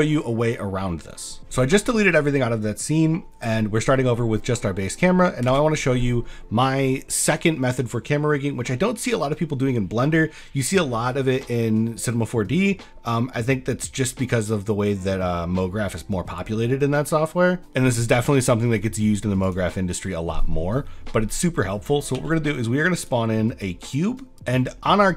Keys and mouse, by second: 2.4 drag, 3.2 click, 4.4 drag, 5.1 click, 5.5 shift+a, 20.2 middle click, 20.8 middle drag, 22.2 s, 24.3 middle click.